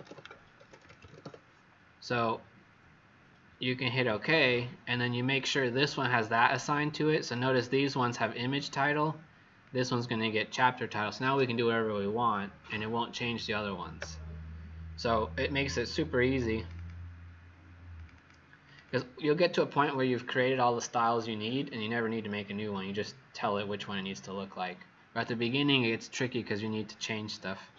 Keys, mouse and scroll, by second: 0.0-1.7 typing, 3.9 click, 16.7 click, 17.9 click, 18.0 click, 18.6 click, 18.8 click.